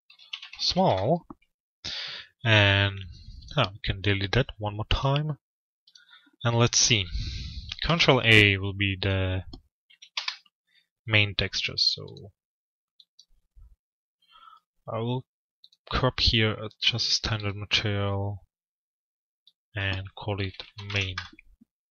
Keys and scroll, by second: 0.4 Return, 3.9 Return, 7.4 ctrl+a, 10.1 Return, 20.6 Return.